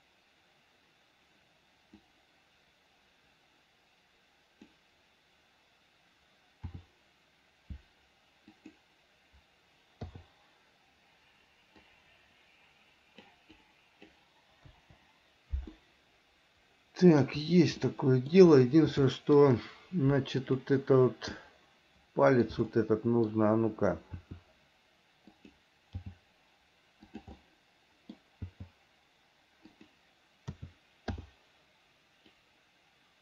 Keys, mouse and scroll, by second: 2.3-5.0 drag, 6.9 r, 12.1-13.5 drag, 13.8 click, 14.9 Delete, 16.0-17.5 middle drag, 18.1 middle click, 19.3 shift+middle click, 20.7 click, 21.6-22.7 middle drag, 22.9 middle click, 24.4 r, 26.3 g, 27.6-28.6 middle drag, 28.6 g, 30.8 a, 31.4 i, 32.6-33.2 drag.